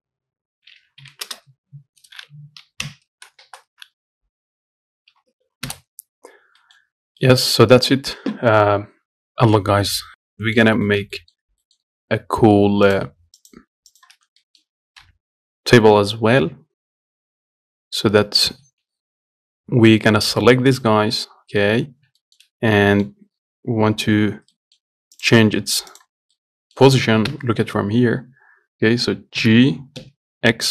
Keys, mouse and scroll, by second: 6.8 middle click, 7.2 scroll down 2, 7.4 shift+middle click, 7.7 scroll up 2, 7.9-9.2 shift+middle drag, 10.2 scroll up 1, 10.3-10.7 scroll down 2, 10.7 middle click, 10.9 scroll up 1, 11.1-13.1 shift+middle drag, 13.1 click, 13.7 shift+click, 14.2 shift+click, 14.7 middle click, 15.3 KP_1, 18.3-18.9 scroll up 1, 18.9 shift+d, 22.5 shift+middle click, 22.8 scroll down 1, 23.0-25.4 middle drag, 25.4 click, 25.9 middle click, 26.0 scroll down 1, 26.2 click, 26.6 middle click, 27.5 KP_7, 29.7 g.